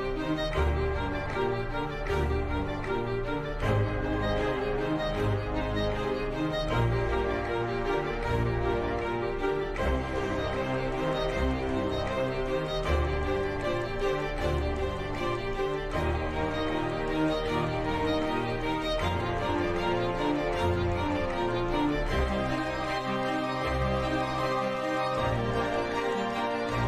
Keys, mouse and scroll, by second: 0.2 g, 2.3 ctrl+Tab, 3.0 ctrl+Tab, 3.4 ctrl+Tab, 4.9 shift+Tab, 6.0 g, 6.8 shift+Tab, 7.1 g, 12.0 g, 13.3-13.8 middle drag, 13.8 g, 16.7 s, 20.0 t, 20.5 t, 21.4 Tab, 21.9 middle click, 22.2-25.1 typing.